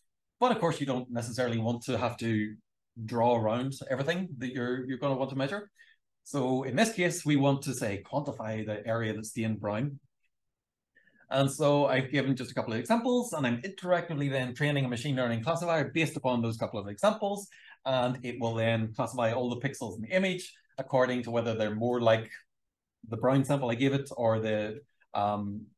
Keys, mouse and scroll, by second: 2.6 click, 3.2-3.8 shift+scroll up 2, 4.0 v, 4.7 click, 6.2 click, 6.7 click, 7.3 shift+scroll down 1, 8.3 super+l, 13.0-14.0 scroll down 4, 14.5 scroll up 2, 15.2 scroll down 2, 15.8-16.1 scroll down 2, 16.4-16.9 scroll up 1, 17.4 click, 18.1 v, 18.4-19.4 drag.